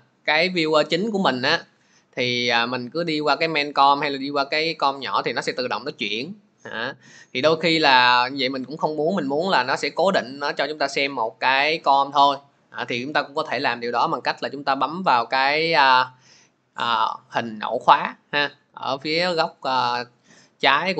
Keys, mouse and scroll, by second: 0.8-1.1 scroll, 4.2 click, 5.0 click, 7.6 click, 8.4 click.